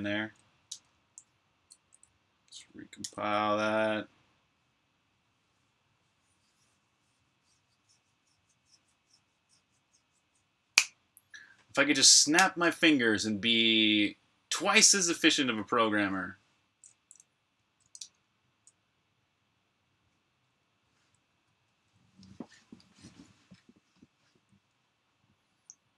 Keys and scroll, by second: 0.6 super+Tab, 2.9 super+b, 2.9-4.2 typing, 17.8 super+Tab.